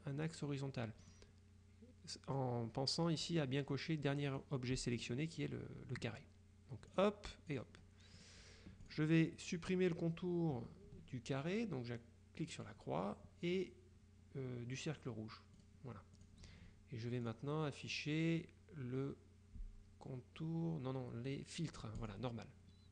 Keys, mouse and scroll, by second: 1.1 click, 4.4 click, 7.0 click, 8.3 click, 9.0 click, 12.7 click, 13.6 click, 15.7 click, 17.4 click, 22.1 click.